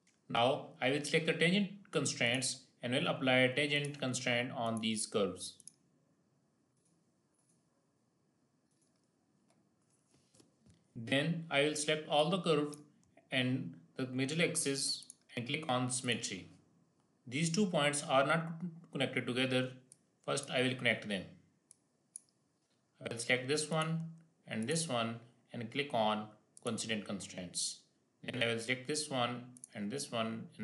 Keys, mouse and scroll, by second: 2.2 click, 5.7 click, 10.9-14.9 drag, 14.9 ctrl+click, 15.9 click, 17.0-17.7 scroll up 1, 19.8 click, 19.9-23.6 drag, 23.7 click, 24.5 ctrl+click.